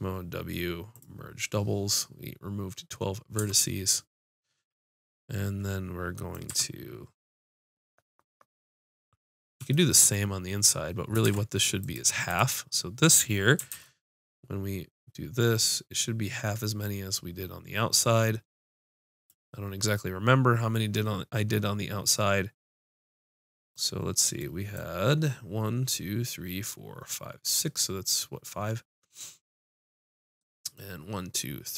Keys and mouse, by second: 3.2 w, 3.4 Tab, 6.5 Tab, 11.2 ctrl+Tab, 12.3-14.1 drag, 13.7 ctrl+b, 17.5-21.2 drag, 23.4 middle click, 24.6-26.9 middle drag, 27.8-29.1 middle drag.